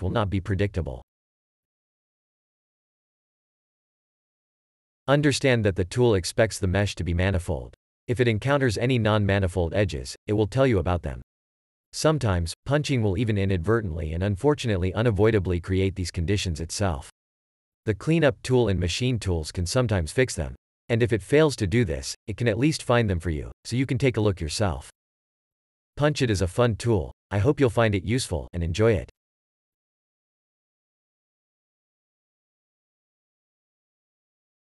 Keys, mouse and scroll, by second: 1.5 shift+e, 3.1 click, 4.1 click, 5.1 a, 5.4 3, 5.9 scroll down 1, 6.6 scroll up 1, 7.2 click, 7.7 scroll up 1, 9.2 shift+e, 9.4 scroll up 1, 10.2 click, 11.6 w, 12.0 click, 12.5 a, 12.9 scroll down 1, 13.2 Tab, 18.5 click, 19.3 i, 20.7 click, 22.0 shift+e, 23.1 click, 23.8 click, 25.0 scroll down 1, 26.6-27.1 scroll up 1, 27.6 Tab, 27.7 click, 28.0 shift+click, 28.3 alt+2, 28.7 Tab, 28.9 shift+click, 29.5 scroll up 1, 30.1 shift+e, 31.7 shift+click, 33.2 w, 33.6 shift+click, 33.9 3.